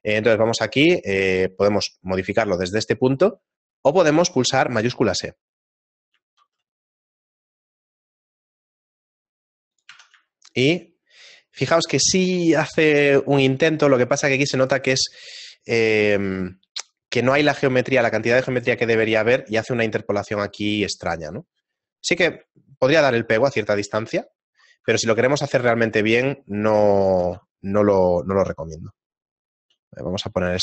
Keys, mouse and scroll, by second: 5.8 middle click, 6.4 shift+e, 9.9 Tab, 10.3 shift+middle click, 13.1 shift+middle click, 15.6 shift+middle click, 19.4 shift+middle click, 21.8 shift+middle click, 21.8 scroll down 1, 22.5 shift+middle click, 22.5 scroll down 6, 24.2 scroll up 2, 26.2 Tab, 26.2 shift+middle click, 26.2-27.8 scroll up 4, 27.8 shift+e.